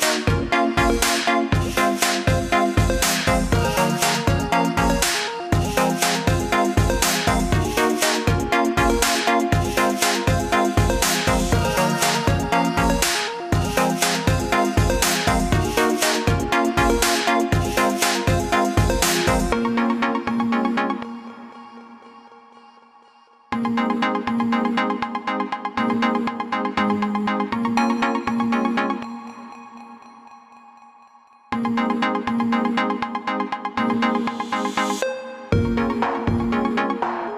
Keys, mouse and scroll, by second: 0.5 click, 3.9 click, 7.8 click, 10.9 click, 11.9 click, 14.0 click, 18.4 click, 28.7 alt+click, 30.5 ctrl+z, 33.5 click.